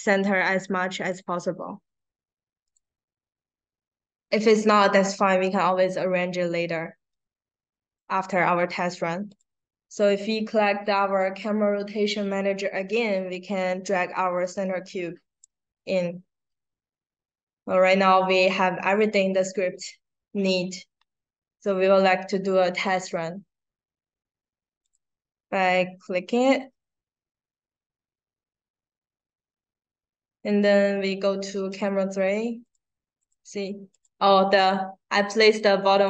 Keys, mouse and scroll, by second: 2.5 click, 7.6 click, 9.2 click, 13.8-15.3 drag, 24.8 click, 31.6 click, 32.5 click, 33.1 click, 34.5 click, 35.1 click, 35.4 click, 35.6 click, 35.9 click.